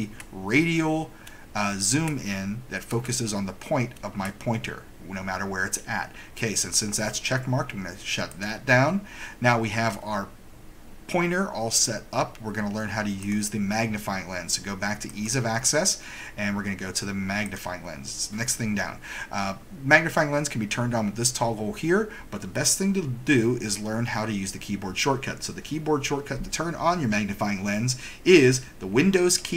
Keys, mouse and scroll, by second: 8.4 click, 13.3 click, 15.3 click, 17.6 click.